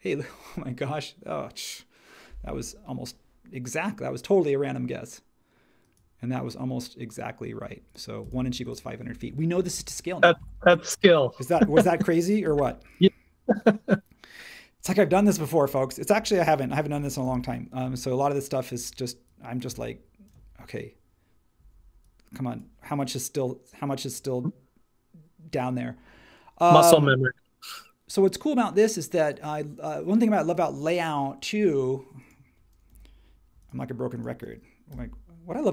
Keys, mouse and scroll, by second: 9.5 space, 12.4 m, 16.4 super+c, 17.2 super+v, 32.9 m, 34.9 m.